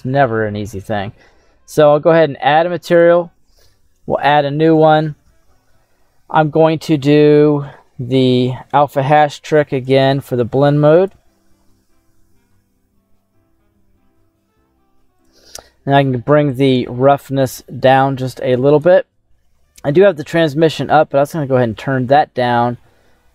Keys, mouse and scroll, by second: 0.6 right click, 1.8 click, 2.9 click, 5.3-6.9 scroll down 8, 6.9-7.8 scroll down 2, 7.8-9.8 scroll down 7, 9.8-11.0 drag, 15.1-15.4 scroll up 7, 16.4-18.8 drag, 20.1-21.2 drag.